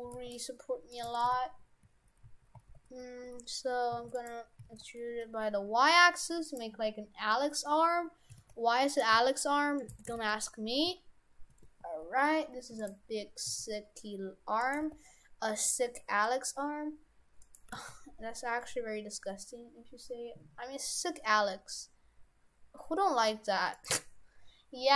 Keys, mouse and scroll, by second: 0.1 g, 1.1 shift+f, 4.6 s, 8.3 s, 9.1 s, 9.9 shift+f, 13.5 s, 14.8 g, 17.7 g.